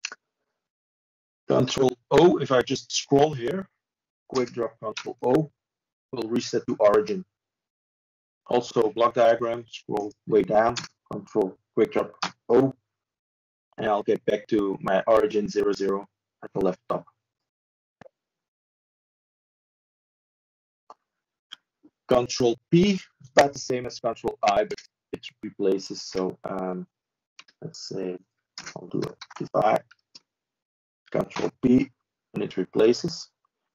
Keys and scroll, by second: 13.1 ctrl+space, 14.7 ctrl+d, 18.8 ctrl+z, 20.2 ctrl+space, 21.3 ctrl+shift+d, 33.2 ctrl+space.